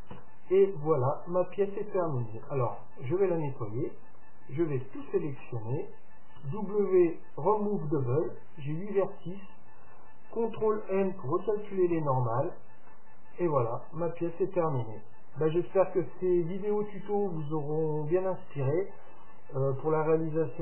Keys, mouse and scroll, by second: 0.2 Tab, 0.7-2.6 middle drag, 2.5 Tab, 3.2-5.2 middle drag, 4.9 a, 5.1 a, 5.4 a, 6.4 w, 8.6 a, 8.6 w, 8.9 w, 10.7 ctrl+n, 12.0 Tab, 12.9-14.9 middle drag, 17.8-19.8 middle drag.